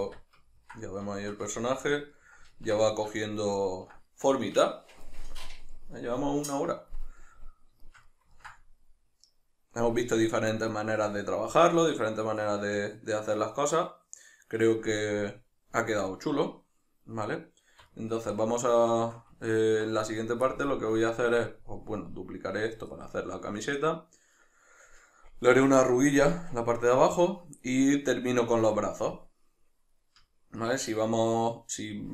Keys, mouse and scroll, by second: 0.0 Tab.